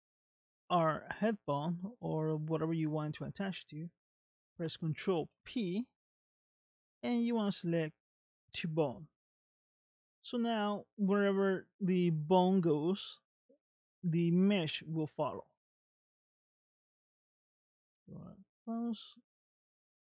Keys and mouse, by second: 5.2 ctrl+p, 10.1 middle click, 15.5 middle click, 18.0 ctrl+Tab, 19.0 middle click, 19.7 click.